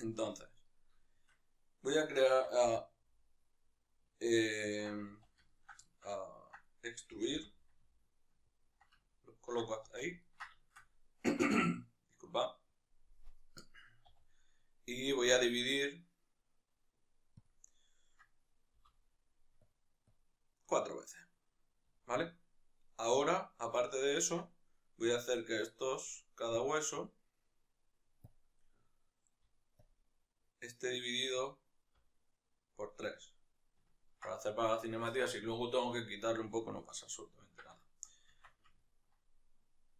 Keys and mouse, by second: 0.2-0.7 right drag, 0.7-4.5 shift+middle drag, 2.1 e, 4.5 ctrl+click, 4.9 z, 5.2 ctrl+middle click, 6.9 g, 8.7 ctrl+middle click, 9.7 z, 10.3-12.1 shift+middle drag, 12.1-17.2 right drag, 17.2 w, 21.7-29.6 shift+middle drag, 24.1 Tab, 29.6-33.6 alt+drag, 33.6 ctrl+middle click, 37.5-38.2 shift+middle drag, 38.2 Tab.